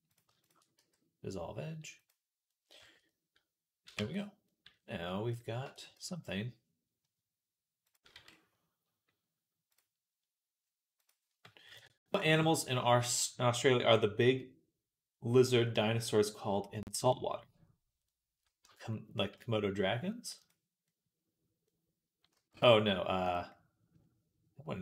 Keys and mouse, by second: 0.1 alt+shift+middle click, 0.2 alt+shift+click, 0.3-2.3 alt+shift+middle drag, 0.6 x, 2.3 click, 2.9 middle click, 3.3-5.2 drag, 3.8 Tab, 5.2-10.8 middle drag, 5.5 Tab, 5.8 z, 8.0 z, 10.8-20.4 drag, 18.5 Tab, 20.4 middle click, 20.8-23.1 middle drag, 22.2 z, 23.1 click, 23.1-24.8 middle drag.